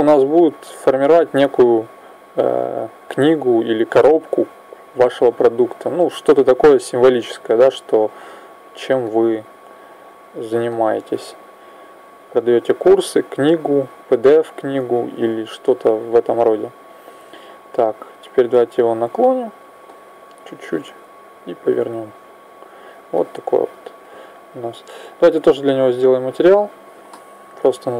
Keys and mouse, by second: 0.8-3.7 drag, 4.9-7.4 middle drag, 5.0 click, 5.0-6.5 right drag, 7.4 click, 7.9 middle click, 9.8 click, 13.7-16.4 drag, 16.9-20.0 drag, 20.0 middle click, 20.9 click, 23.0-25.0 middle drag, 25.4-27.9 drag.